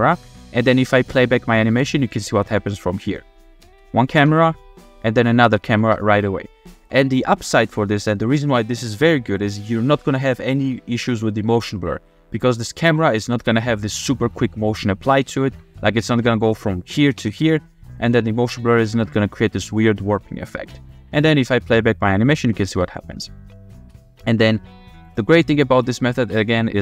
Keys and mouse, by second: 1.2-1.7 drag, 3.6 space, 5.8 space, 7.4 click, 12.6 click, 13.0 g, 13.3-15.8 drag, 17.2 g, 20.9 click, 21.6 space, 23.7 space, 25.0 middle click.